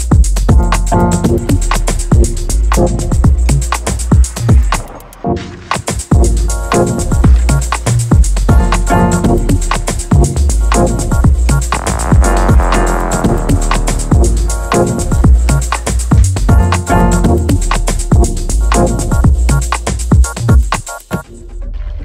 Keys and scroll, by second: 2.9 4, 3.0 3, 3.1 Return, 4.3 s, 6.0 ctrl+r, 8.2 ctrl+r, 9.6 ctrl+r, 10.8 x, 12.0 shift+Left, 12.4 shift+Right, 12.8 shift+Right, 13.2 x, 14.2 ctrl+v, 15.1 b, 15.8 shift+Down, 15.9 shift+Left, 16.4 shift+Down, 16.8 shift+Right, 18.8 shift+Down, 19.1 ctrl+z, 20.3 shift+Down, 21.3 shift+Right.